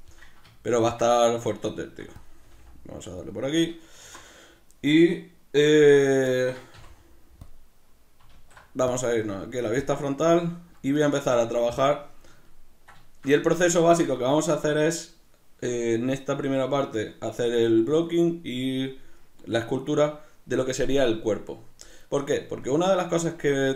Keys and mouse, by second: 0.7-2.2 ctrl+middle drag, 1.9 s, 2.2 click, 2.4 g, 3.3 click, 3.6-6.7 right drag, 6.7-10.9 middle drag, 6.7 x, 10.9-12.4 right drag, 12.4-23.7 ctrl+middle drag.